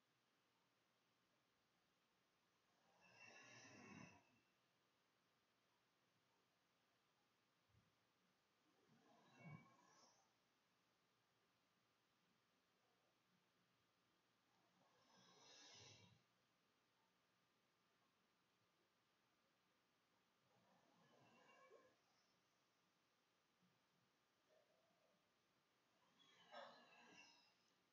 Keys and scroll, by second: 7.1 -, 7.2 ], 7.9 Return, 9.6-13.4 typing, 16.3-18.3 typing, 19.3 [, 19.6 ], 19.7 \, 19.7 Delete, 20.0 End, 20.7 Delete, 20.8-23.2 typing, 26.4 Escape.